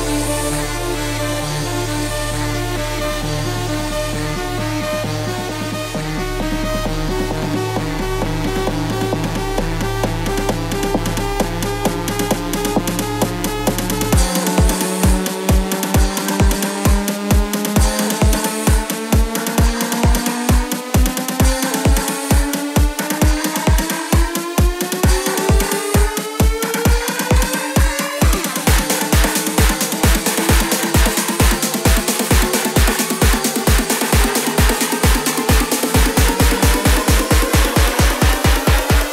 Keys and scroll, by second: 27.6 ctrl+t.